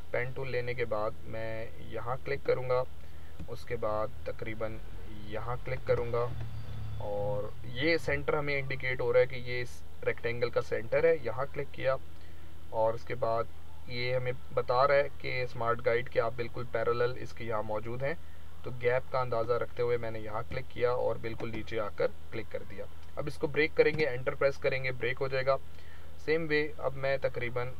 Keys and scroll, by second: 23.8 Return.